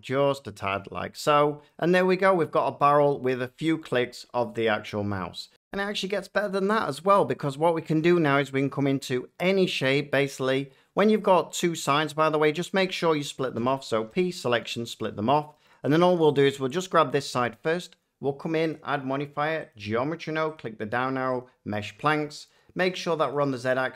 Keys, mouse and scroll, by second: 0.6 shift+click, 2.5 middle click, 5.2 F9, 5.8 F9, 6.5 shift+middle click, 6.9-7.9 shift+scroll, 7.2 shift+middle click, 8.0 shift+middle click, 8.3 scroll, 10.2 Tab, 13.5 p, 14.1 click, 14.6 Tab, 15.6 middle click, 16.3 click, 18.6 click, 19.6 click, 20.5 click, 21.3 click, 23.2 click.